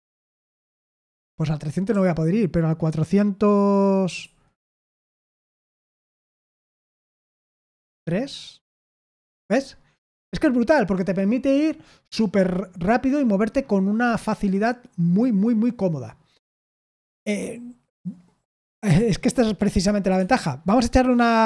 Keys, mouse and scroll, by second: 1.8 BackSpace, 4.1 4, 7.9 0, 20.1 Escape.